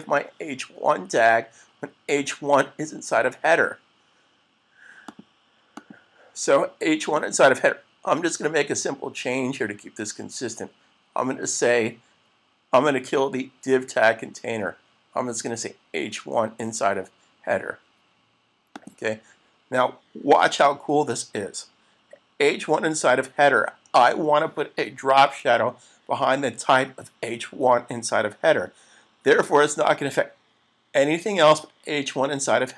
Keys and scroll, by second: 25.2 super+s.